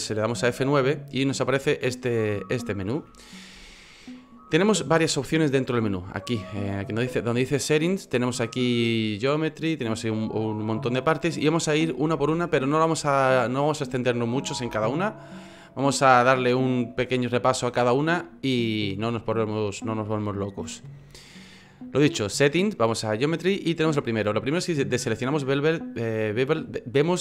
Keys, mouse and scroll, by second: 0.4 F9, 3.0 F9.